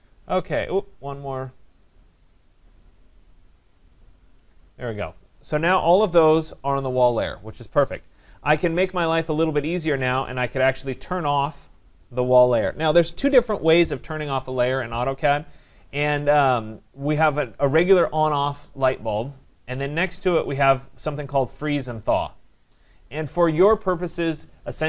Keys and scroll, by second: 4.3 Escape.